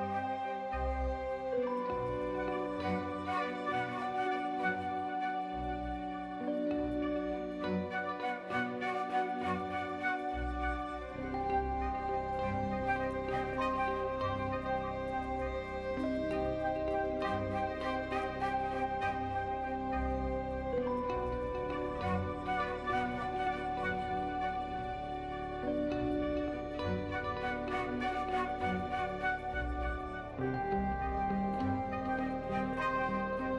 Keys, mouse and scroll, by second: 0.8 s, 1.9 g, 3.6 ctrl+r, 7.5 Tab, 8.1 drag, 8.5 Tab, 9.1 ctrl+r, 11.8 Tab, 12.0 click, 12.2 drag, 12.5 shift+drag, 12.9 click, 14.3-15.8 drag, 16.5 click, 17.4-18.1 drag, 20.1-22.5 shift+drag, 23.1 click, 24.1 shift+a, 27.1 ctrl+2, 28.0-29.2 drag, 29.9 g, 32.3 Tab, 33.4 s.